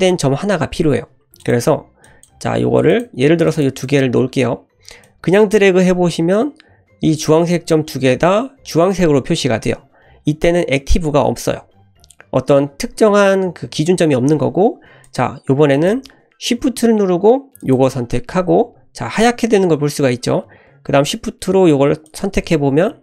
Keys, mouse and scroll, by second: 1.4 click, 2.0 click, 2.5 e, 3.5 click, 3.8 click, 5.0 click, 15.0 click, 15.7 click, 17.6 shift+click, 22.0 shift+click.